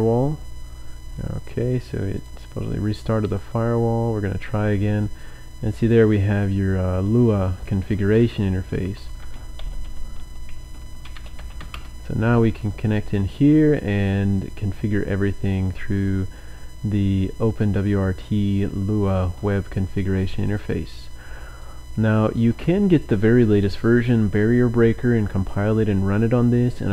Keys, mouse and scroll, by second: 1.3-2.6 typing, 2.3 click, 3.3 click, 5.1-6.1 drag, 8.8-11.8 typing, 14.5 click, 20.5 click, 21.0 click, 21.2 click, 21.6-23.2 drag.